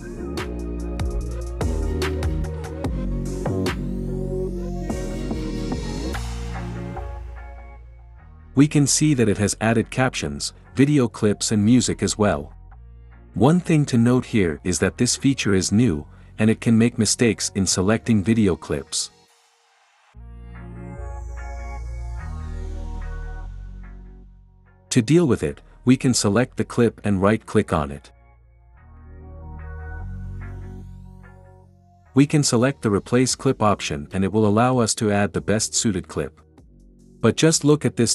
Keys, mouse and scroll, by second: 12.2-12.9 drag, 12.9 space, 29.8-30.8 drag, 31.7 right click, 36.9-37.9 drag.